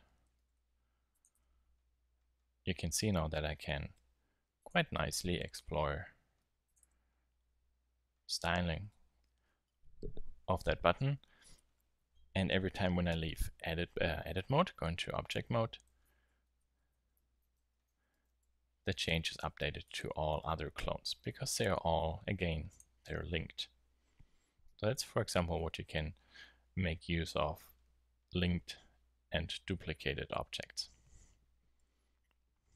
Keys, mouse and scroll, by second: 0.3 g, 1.3 Tab, 3.2 Tab, 5.4 g, 6.8 Tab, 8.4 Tab, 15.4 Tab, 15.9 Tab, 16.3-18.1 typing, 18.4 Tab, 18.9 Tab, 19.3 z, 19.6 z, 19.8 z, 20.3 Tab, 24.3 click, 24.4 middle click, 24.9-25.5 middle drag, 25.8-31.6 middle drag, 31.8 KP_7.